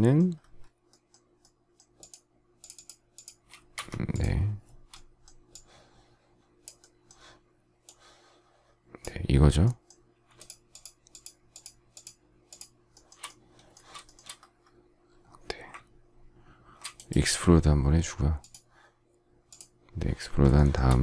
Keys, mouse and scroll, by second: 3.7 Escape, 10.3 shift+click, 10.7 shift+click, 10.8 shift+double click, 11.0 shift+click, 11.5 shift+click, 11.6 shift+double click, 11.9 shift+click, 12.5 shift+click, 12.9 shift+middle click, 14.0 shift+middle click, 20.5 shift+middle click.